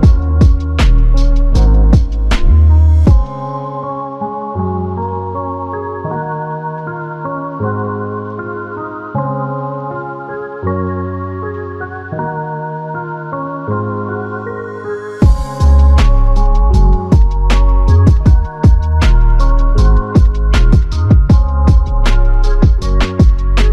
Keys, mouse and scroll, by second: 2.3 ctrl+click, 8.5 ctrl+click, 9.0 ctrl+click, 11.4 alt+click, 11.4 alt+click, 15.0 alt+click, 19.9 ctrl+click, 22.7 q, 22.9 alt+click.